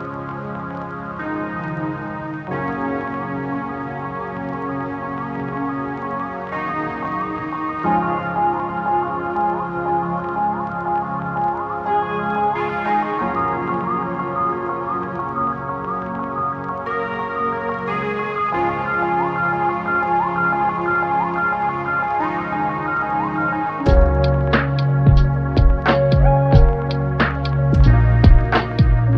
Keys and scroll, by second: 3.5 8, 8.2 Tab, 13.6 Tab, 18.2 Delete.